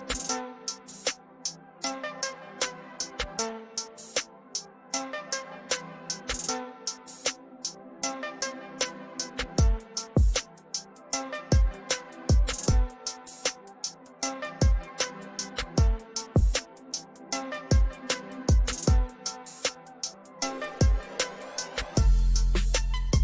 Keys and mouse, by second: 0.8 click, 4.5 click, 6.6 click, 11.2 click, 12.5 click, 14.4 click, 21.3 click.